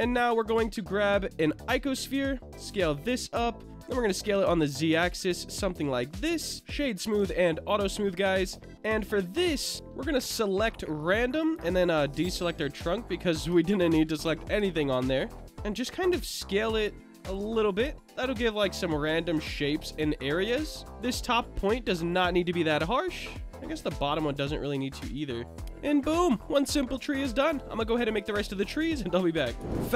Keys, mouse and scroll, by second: 2.5 s, 3.1 click, 4.2 s, 4.5 z, 5.4 click, 6.5 click, 6.5-7.1 middle drag, 7.2 Tab, 8.5 click, 9.9-11.2 middle drag, 12.2 shift+click, 12.6 middle click, 13.7 shift+click, 14.1 middle click, 15.1 shift+click, 15.4 middle click, 16.2 s, 17.2 click, 17.4 Tab, 17.6-20.6 middle drag, 20.8 Tab, 22.1 click, 22.8 click, 23.2 click, 23.4 Tab, 25.1 click, 26.9-27.5 middle drag, 27.8 click.